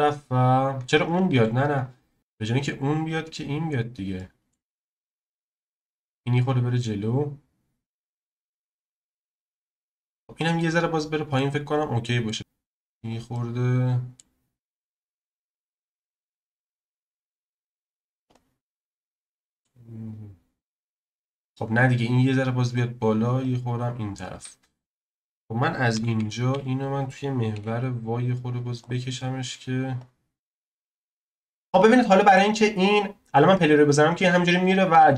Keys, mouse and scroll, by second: 1.3 ctrl+z, 1.7 click, 2.2 z, 2.2 click, 4.2-4.7 middle drag, 4.7-5.8 scroll down 1, 5.8 click, 8.2 click, 9.7 shift+click, 10.3 click, 11.3-12.6 middle drag, 12.6 click, 13.3-15.0 middle drag, 15.0 click, 16.8-18.2 middle drag, 18.2-18.7 drag, 18.7-21.2 middle drag, 21.2 click, 23.4 click, 24.8 click, 25.9 s, 30.0 click, 32.0-33.8 middle drag, 33.8-35.1 drag.